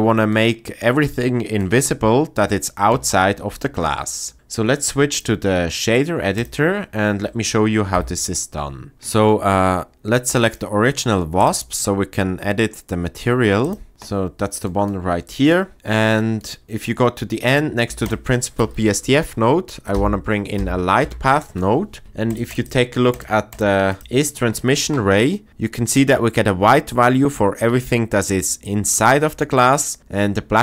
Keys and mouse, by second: 0.3 click, 0.5 middle click, 1.0 middle click, 4.1 click, 5.1-6.4 drag, 7.9 n, 10.5 click, 15.5 click, 16.2 click, 17.9 shift+a, 22.3 ctrl+shift+click, 22.7 ctrl+shift+click, 23.1 ctrl+shift+click, 23.5 ctrl+shift+click, 23.9 ctrl+shift+click.